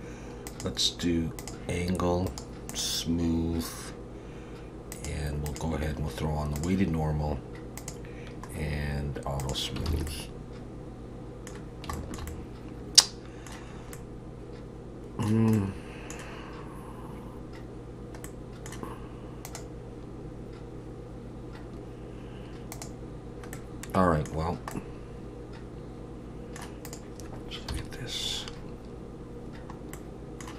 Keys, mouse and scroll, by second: 0.5 click, 2.3 right click, 4.9 click, 5.5 click, 7.8 click, 8.5-9.4 scroll down 1, 9.4 scroll down 3, 9.4 click, 9.9 alt+a, 10.1 middle click, 11.6-11.9 scroll down 2, 11.9 shift+middle click, 12.3 middle click, 13.7-14.8 scroll up 2, 13.9 middle click, 15.5 middle click, 18.2 middle click, 23.5 middle click, 24.5 scroll down 2, 24.7 middle click, 26.9 click, 27.7 KP_1, 29.9 middle click.